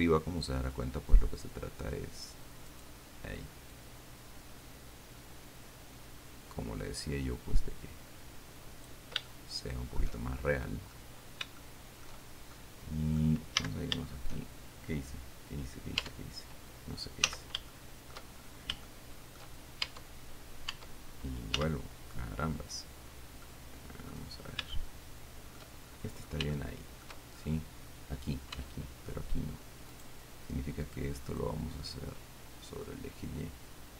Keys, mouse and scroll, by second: 1.0-2.7 drag, 3.0 right click, 4.0-9.3 drag, 9.5 shift+middle click, 10.7 shift+middle click, 11.5 scroll down 2, 11.8 shift+middle click, 12.8 shift+middle click, 13.8 a, 16.4 Tab, 17.5 z, 18.0 shift+middle click, 19.1 shift+middle click, 20.2 Tab, 21.9 z, 23.7 middle click, 25.0-26.0 shift+middle drag, 26.3-26.9 shift+scroll up 1, 26.8 shift+middle click, 26.9 shift+right click, 28.8 Tab, 30.2 middle click, 31.9-33.9 drag.